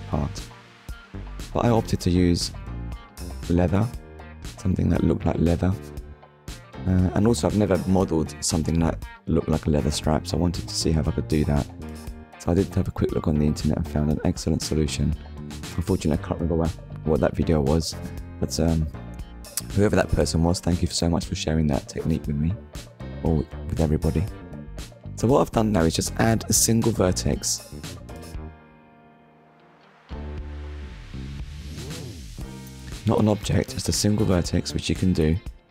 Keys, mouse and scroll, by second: 0.9 KP_1, 1.9-2.3 scroll up 1, 2.9 scroll down 1, 4.3 click, 5.3 click, 10.7 shift+a, 18.0 click, 19.9 click, 22.3 click, 23.2 shift+middle click, 25.8 click, 30.3 click, 31.3 click, 32.0 scroll up 1, 33.2 shift+middle click.